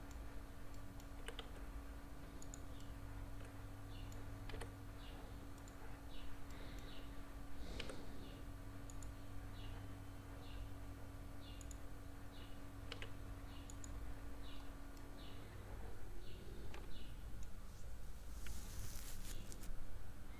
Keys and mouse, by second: 0.7 middle click, 1.2 s, 2.8-4.1 middle drag, 4.5 g, 6.5 middle click, 7.8 q, 12.9 q, 15.0-17.4 middle drag.